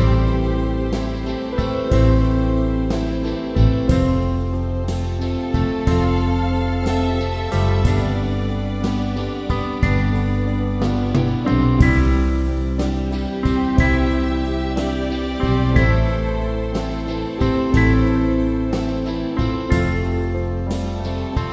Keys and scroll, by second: 0.0-1.6 typing, 7.0 typing, 12.9 typing, 18.0 [, 20.3-21.5 typing.